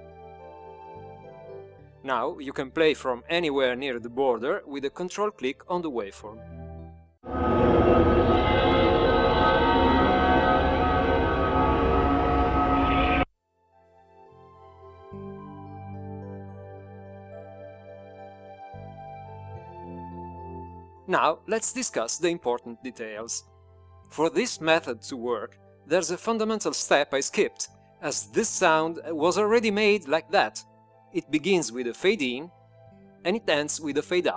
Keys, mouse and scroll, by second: 3.4 click, 7.4 ctrl+click, 13.9 click, 26.3-28.8 drag.